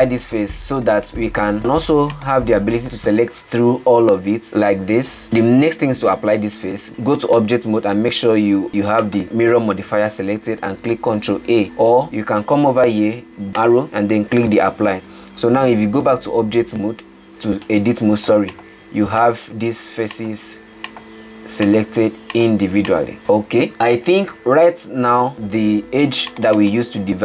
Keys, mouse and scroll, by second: 1.5 middle click, 1.6 Tab, 2.6 click, 5.2 Tab, 9.2 click, 11.6 ctrl+a, 12.0 ctrl+z, 13.8-15.3 drag, 16.5 Tab, 18.2-19.0 middle drag, 19.0 click, 19.6 click, 20.6 click, 21.3 click, 22.1 click, 22.8 drag, 23.2-25.5 middle drag, 26.1 2, 26.5 click, 26.8 click, 27.1 click.